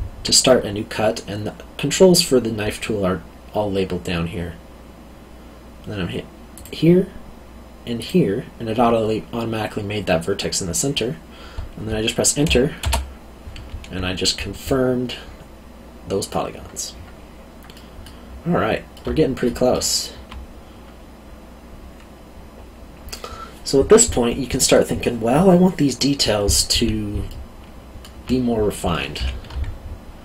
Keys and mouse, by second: 6.5 click, 14.2 middle click, 17.7 middle click, 27.3 alt+middle click, 29.1 2.